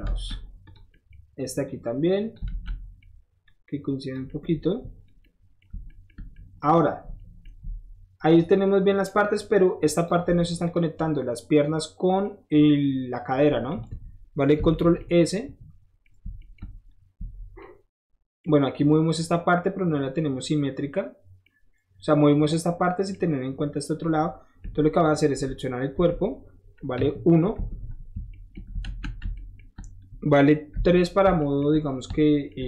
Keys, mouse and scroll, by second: 0.1 alt+z, 0.6 click, 0.9 middle click, 1.6 click, 2.5 alt+z, 2.7 middle click, 3.5 click, 4.3 middle click, 5.1 middle click, 5.9 shift+middle click, 6.3 shift+middle click, 7.3-8.4 shift+middle drag, 9.0 middle click, 10.0 click, 10.4 Tab, 10.6 click, 12.3 middle click, 14.5 ctrl+s, 17.2 shift+Tab, 19.3 middle click, 19.6-21.4 middle drag, 22.3 middle click, 23.1-24.7 middle drag, 24.9 click, 25.3 Tab, 25.9 Tab, 26.9 KP_1, 27.5 Tab, 28.2 shift+middle click, 28.3 shift+middle drag, 28.8 z, 29.3 alt+shift+middle drag, 30.7 3, 31.4 middle drag, 31.9-32.6 middle drag, 32.1 shift+3.